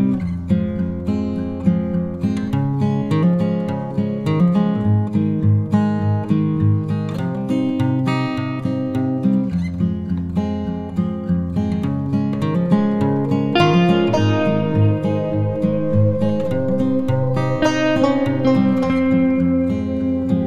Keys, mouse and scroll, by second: 1.4 click, 1.6 j, 4.4 click, 14.3-14.8 scroll up 2, 16.1-20.4 alt+drag.